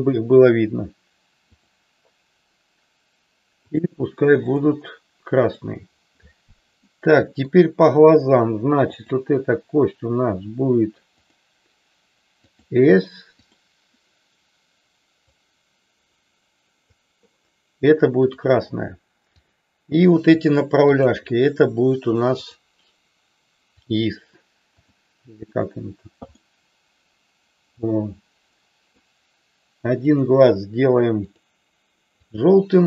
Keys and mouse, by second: 4.6 click, 5.5 click, 6.8 middle click, 8.9-9.9 drag, 11.2-12.7 drag, 13.3 click, 15.4-17.1 drag, 18.2 click, 19.3-20.4 drag, 20.9-21.9 shift+drag, 22.4-23.9 drag, 24.8 click, 26.7-29.1 middle drag, 31.3 click.